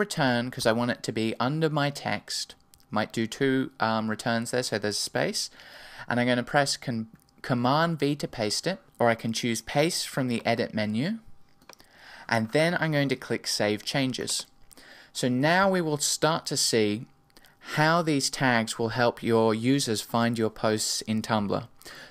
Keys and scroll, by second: 0.6 Return, 8.8 super+v.